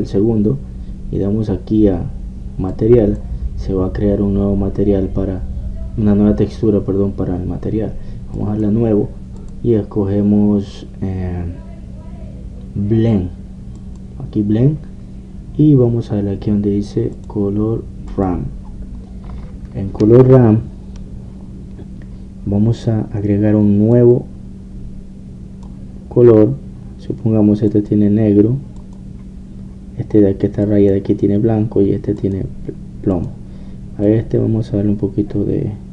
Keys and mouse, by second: 9.4-12.3 drag, 18.2-27.1 drag, 28.7-35.9 drag.